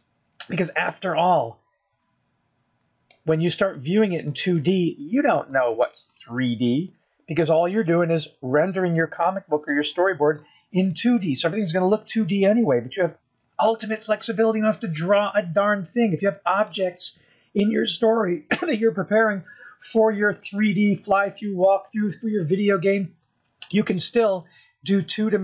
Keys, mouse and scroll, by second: 5.0-5.5 scroll down 2, 5.5 middle click, 10.4 KP_0, 11.2 scroll up 2, 12.1 shift+middle click, 15.0 s, 19.5-20.4 scroll up 2.